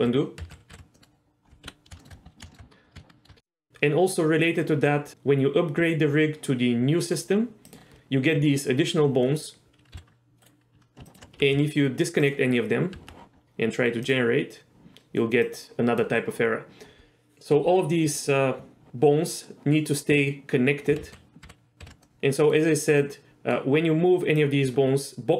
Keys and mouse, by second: 0.1 ctrl+z, 0.5 ctrl+z, 0.8 ctrl+z, 1.0 middle click, 2.0 shift+middle click, 2.5 shift+middle click, 3.1 shift+middle click, 7.8 click, 9.4 middle click, 10.0 s, 11.5 g, 13.1 Tab, 14.4-17.9 drag, 21.2 ctrl+z, 21.5 ctrl+z, 21.9 ctrl+z, 22.1 middle click, 23.1 middle click, 24.5 click.